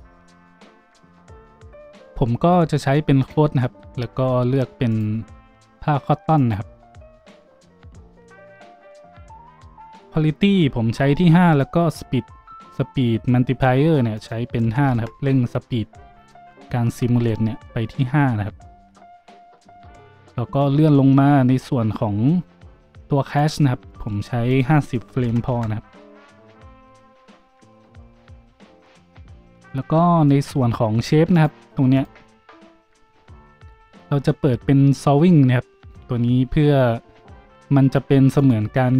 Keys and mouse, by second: 38.6-38.9 middle drag.